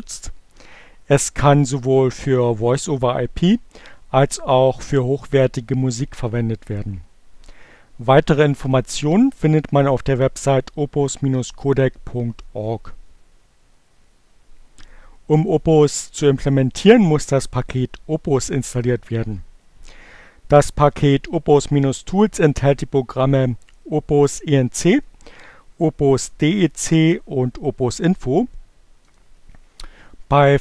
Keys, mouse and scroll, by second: 8.7 click, 15.4 click, 27.7 click.